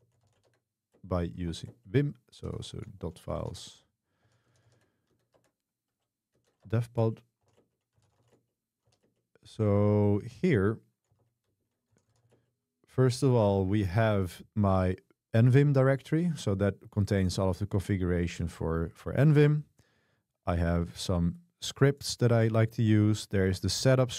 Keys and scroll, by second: 0.0-9.4 typing, 1.0 Return, 5.4 Tab, 6.7 Tab, 7.0 Return, 10.9-12.8 typing.